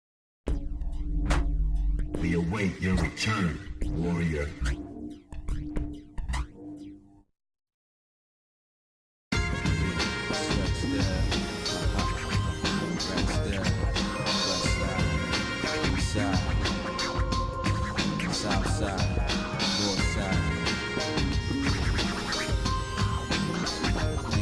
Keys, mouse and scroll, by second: 1.0 shift+middle click, 1.6 shift+middle click, 2.4 shift+middle click, 4.2 shift+d, 9.0-10.4 shift+middle drag, 11.3 g, 13.8 shift+middle click, 14.6 middle click, 15.1-16.2 shift+middle drag, 16.4 middle click, 16.9 scroll up 1, 17.5-19.7 shift+middle drag, 20.8 shift+middle click, 22.9 g.